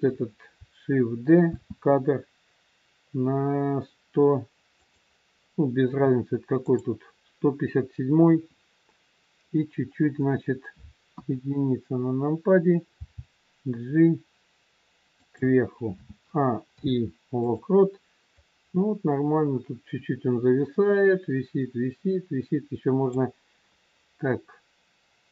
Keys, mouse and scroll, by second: 1.4 shift+d, 6.5 click, 11.1 KP_1, 13.0 g, 15.8 a, 16.7 i, 18.4 click.